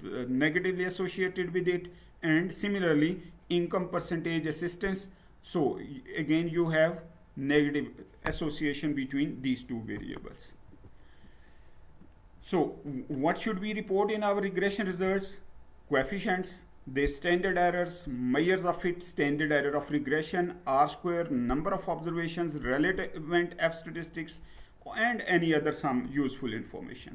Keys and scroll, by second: 10.7 Down, 27.0 Down.